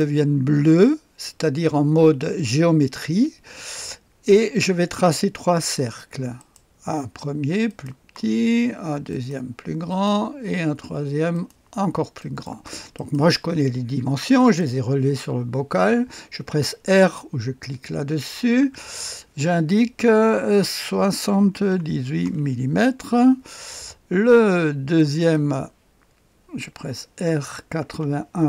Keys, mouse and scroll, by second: 4.8 click, 6.3 click, 6.3 right click, 7.6 click, 7.6 right click, 9.1 click, 9.1 right click, 9.9 right click, 10.1 click, 11.3 right click, 11.5 click, 12.2 middle click, 12.4 click, 12.9 right click, 14.3 middle click, 14.6 click, 18.6 r, 21.4 KP_7, 21.6 KP_8, 22.2 Return, 24.9 click, 27.2-28.4 typing.